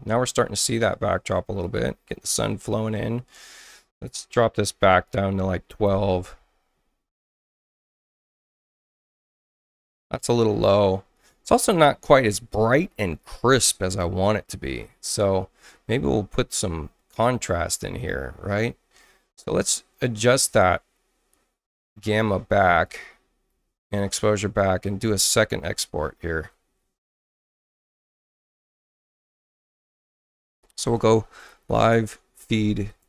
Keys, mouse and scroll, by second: 1.6 click, 4.8 click, 5.6 1, 5.8 Return, 14.7 click, 20.4-22.8 drag, 23.5-24.8 drag, 28.3 ctrl+alt+shift+w, 29.7 click, 31.0-33.0 typing.